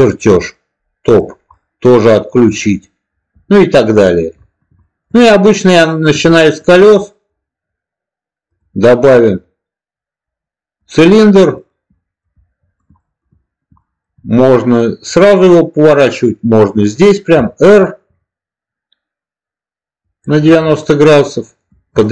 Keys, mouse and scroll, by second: 1.0 click, 1.5-4.1 middle drag, 4.7 shift+middle click, 6.3 shift+middle drag, 6.9 middle click, 8.4-10.9 drag, 11.6-12.1 middle drag, 12.9 shift+middle click, 13.7 shift+middle click, 17.2 r, 19.9 click, 20.5-21.6 middle drag, 21.9 shift+middle drag.